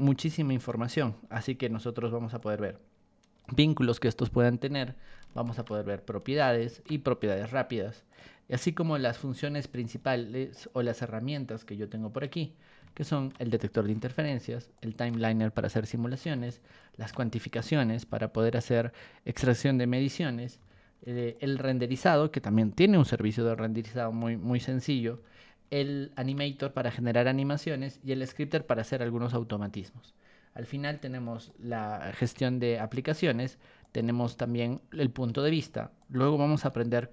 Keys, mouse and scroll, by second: 0.1 r, 1.3 b, 2.4-3.4 ctrl+drag, 5.4 ctrl+shift+click, 6.6 ctrl+shift+click, 7.2 right click, 8.1 click, 8.9 r, 10.6-12.2 ctrl+drag, 13.1 ctrl+shift+click, 14.7 ctrl+shift+click, 16.8 ctrl+shift+click, 20.5 b, 21.3 ctrl+shift+click, 25.1 r, 26.1 ctrl+shift+click, 28.1 ctrl+shift+click, 30.9 ctrl+click, 32.2 Escape, 33.8 click, 35.3 ctrl+1, 36.0 click, 36.7 b.